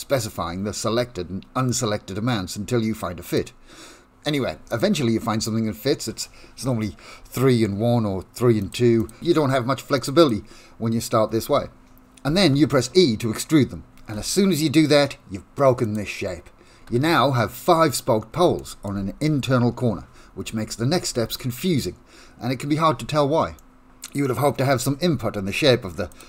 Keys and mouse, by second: 1.6 click, 4.7 click, 8.6 click, 9.0 click, 9.9 click, 10.1 click, 14.1 e, 16.8 1, 17.6 click, 18.6 shift+middle click, 23.5-24.7 middle drag, 24.8 Tab, 25.9 ctrl+3, 26.1 right click.